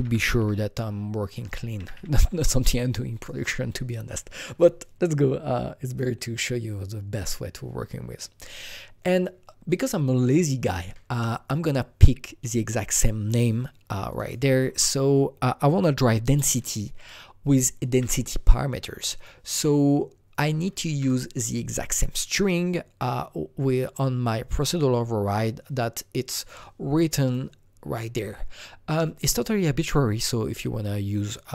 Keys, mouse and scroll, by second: 0.0-0.3 typing, 1.5 typing, 5.4 click, 5.4-5.9 typing, 5.9 click, 5.9 click, 14.0 click, 14.2 double click, 17.7 ctrl+c, 19.1 click, 20.3 click, 20.8 ctrl+v, 26.3 ctrl+v, 26.3 click, 27.2 click.